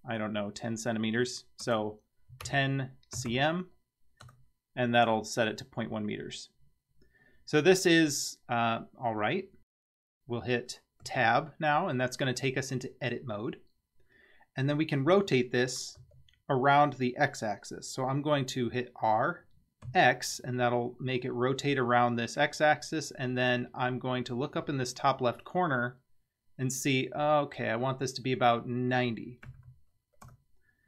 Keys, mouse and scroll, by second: 7.2-7.8 scroll up 10, 8.5-9.4 scroll down 2, 9.7 scroll down 3, 11.1 Tab, 16.0 r.